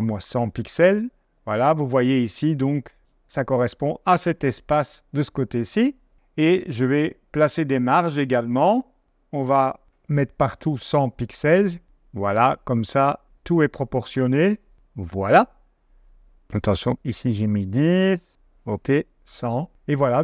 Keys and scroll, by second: 10.4-11.3 typing, 14.1-15.9 typing, 18.8-19.6 typing.